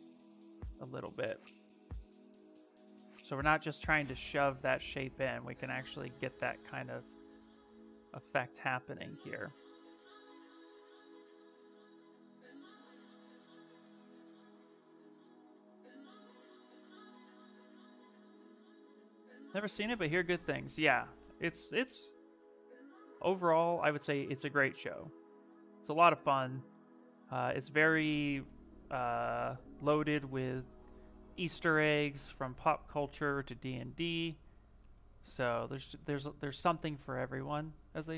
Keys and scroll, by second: 19.9-21.8 typing, 32.3 s.